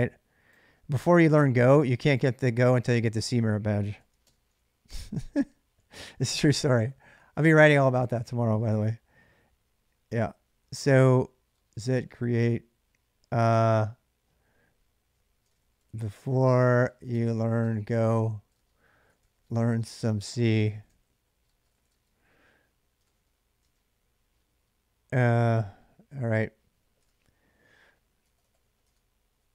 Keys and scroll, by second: 3.7 ctrl+a, 4.0 typing, 5.7-6.8 typing, 10.3-12.6 typing, 14.7-23.4 typing, 26.5-29.1 typing.